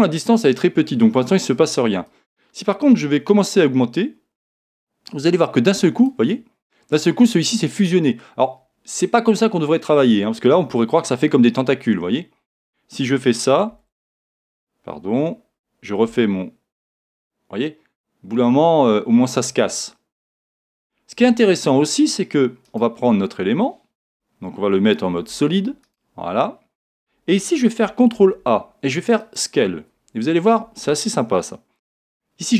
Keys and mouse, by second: 2.1 click, 13.7 z, 16.1 r, 22.6 right click, 24.0 a, 25.1 z, 25.8 right click, 27.6 z, 28.1 ctrl+a.